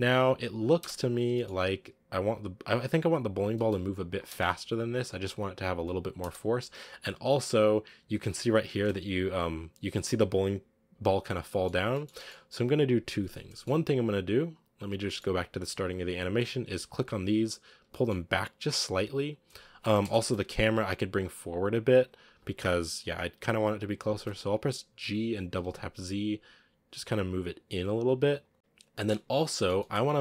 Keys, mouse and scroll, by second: 0.5 scroll down 2, 0.6 space, 1.2-3.4 shift+middle drag, 3.4 space, 3.7 click, 4.1 space, 6.0 space, 6.4-7.1 scroll down 3, 7.1 click, 7.7-8.0 scroll up 1, 8.0 space, 8.6 space, 9.1-10.8 drag, 10.8 scroll up 1, 11.2 scroll down 3, 11.3 middle click, 11.7 shift+middle click, 12.0 middle click, 12.3-13.4 scroll up 1, 13.4 middle click, 13.9 click, 14.7 scroll down 3, 15.0-16.0 middle drag, 16.0 right click, 16.8 shift+right click, 17.7 g, 19.9 KP_0, 20.5-21.1 scroll up 1, 21.1 right click, 25.1 g, 28.5 scroll down 5, 28.8-29.1 middle drag, 29.1 scroll down 2, 29.4-29.8 shift+middle drag, 29.8 scroll up 1.